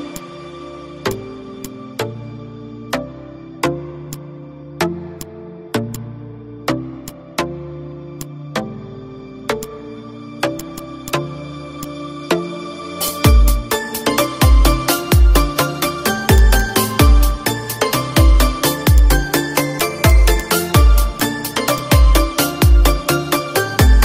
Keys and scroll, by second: 1.8 z, 2.6 space, 5.6 ctrl+d, 7.3 space, 8.6 ctrl+d, 9.2 ctrl+z, 10.2 ctrl+d, 13.7 space, 15.2 ctrl+g, 15.9 space, 17.5 ctrl+g, 18.7 ctrl+g.